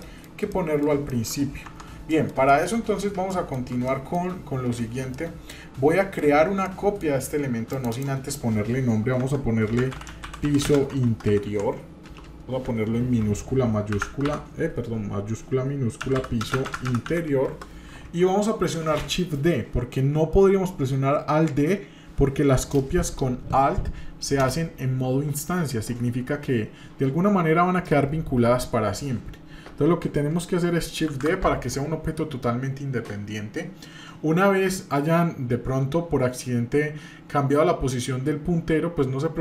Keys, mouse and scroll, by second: 0.0 shift+middle click, 0.5 middle click, 1.1 shift+middle click, 1.7 Tab, 2.1 middle click, 2.5 shift+middle click, 2.8-3.2 scroll up 1, 3.3 shift+middle click, 3.9 middle click, 5.1-6.2 middle drag, 6.6 middle click, 7.7 click, 7.9-18.2 drag, 12.2 BackSpace, 31.1 shift+d.